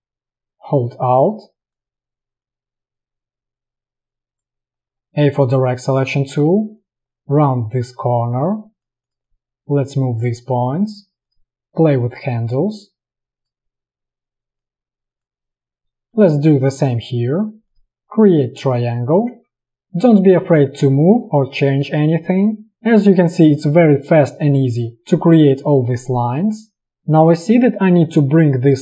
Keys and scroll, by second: 5.0 a, 17.1 p, 22.0 space.